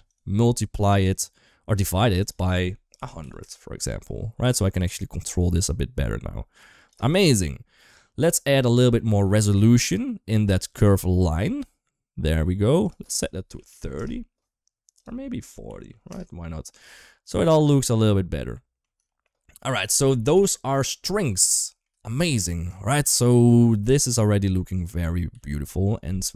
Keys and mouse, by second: 2.1-3.4 drag, 3.0 0, 4.8-6.7 shift+drag, 7.1-8.5 middle drag, 9.5 middle click, 10.7 middle click, 12.8-13.9 drag, 14.8-16.0 drag, 17.2-18.6 middle drag, 18.9 shift+middle click, 20.0 middle click, 21.3 shift+middle click, 22.7 shift+middle click, 23.3 shift+middle click, 25.6 ctrl+s.